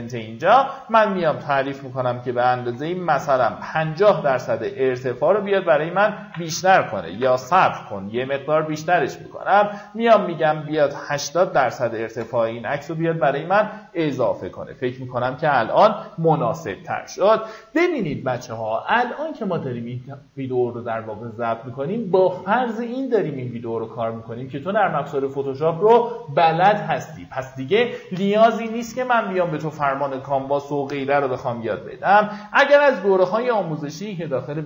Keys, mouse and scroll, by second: 2.8 KP_5, 4.5 click, 8.0 click, 10.9 KP_8, 13.1-13.8 alt+scroll down 2, 14.1-14.5 alt+scroll up 1.